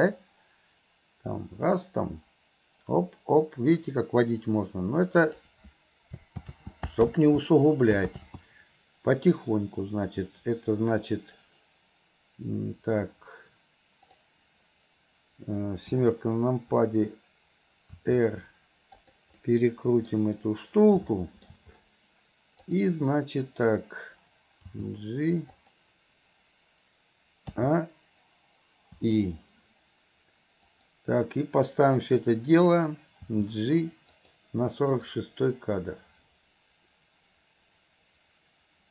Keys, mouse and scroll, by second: 14.1 click, 19.4-20.2 middle drag, 22.7 click, 30.7 click, 35.2-38.9 drag.